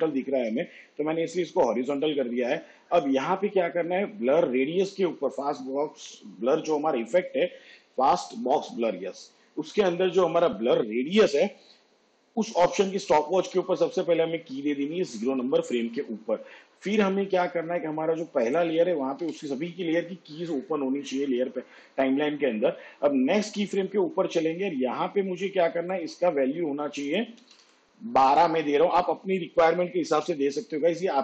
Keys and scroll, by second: 19.3 u, 23.6 k, 27.3-28.2 typing.